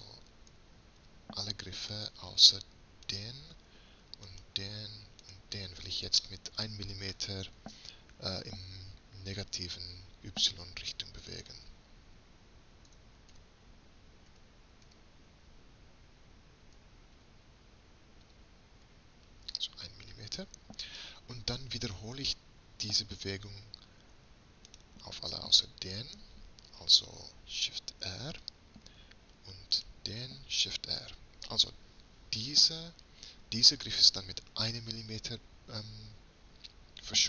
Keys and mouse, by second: 0.6 a, 1.1 a, 2.0-8.4 middle drag, 13.0 g, 24.7-28.1 drag, 28.1 shift+r, 30.7 shift+r.